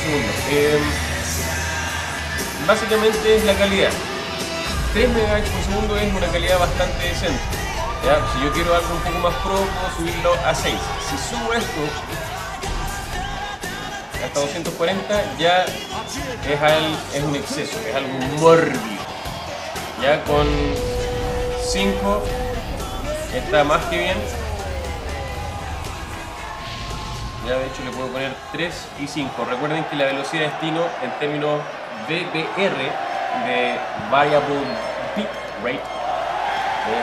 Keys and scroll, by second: 16.5 alt+super++, 17.4 alt+super+-, 21.8 5, 25.3 5, 29.0 3.